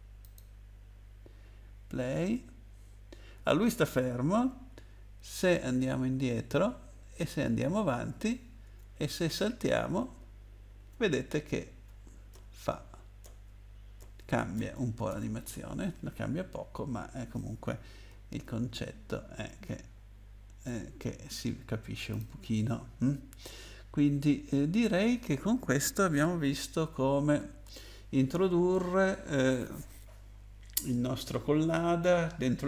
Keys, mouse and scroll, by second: 0.2 click, 5.8 Down, 6.3 Down, 9.0 space, 9.5 space, 14.0 space, 18.1 space, 18.6 space, 22.1 click, 24.5-25.7 scroll up 2, 26.7-27.3 scroll down 2.